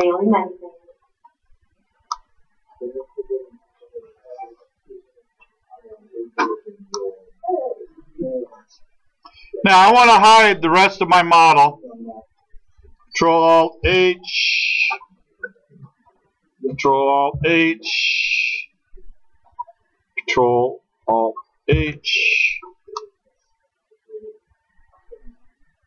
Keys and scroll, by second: 9.8 space.